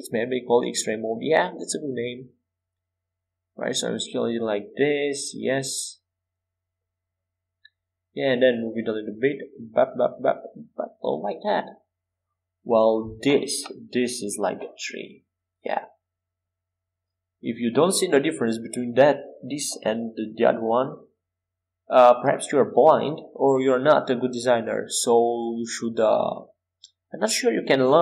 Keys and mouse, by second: 1.2 s, 9.5-12.4 drag, 12.9-18.2 middle drag, 18.2 a, 19.5 x, 21.8 c, 27.7 s.